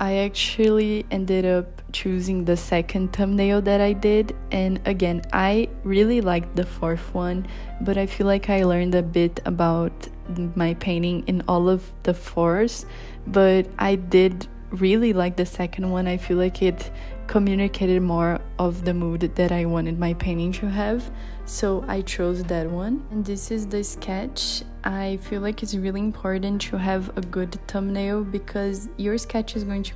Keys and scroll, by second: 0.4 b, 16.5 i, 16.9 b, 18.3 z.